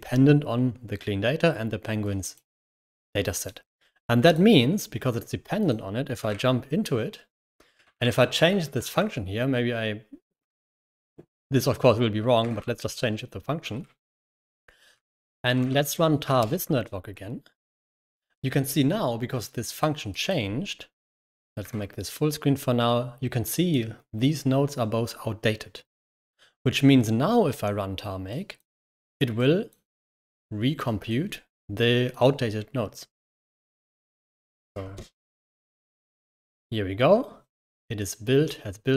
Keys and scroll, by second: 6.2 ctrl+6, 7.3 Escape, 7.7 j, 7.8 j, 8.6 $, 8.7 Escape, 10.3-11.3 typing, 12.3 ctrl+s, 13.6 ctrl+6, 13.8-16.7 typing, 21.5 super+m, 25.8 super+m, 33.3 j, 33.5 j, 33.8 j, 34.8 ctrl+Return, 36.2 ctrl+l, 36.5 i.